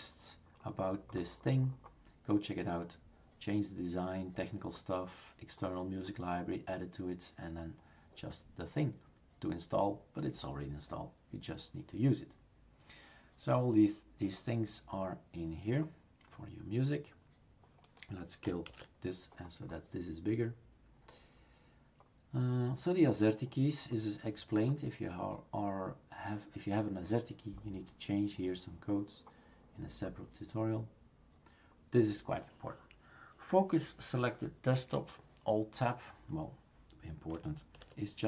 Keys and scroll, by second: 18.7 shift+super+q, 37.8 alt+Tab.